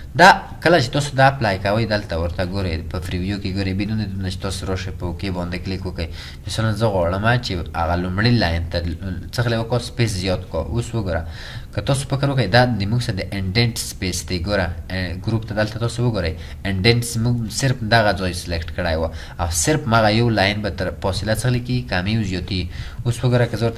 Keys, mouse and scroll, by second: 10.5 double click, 21.5 double click.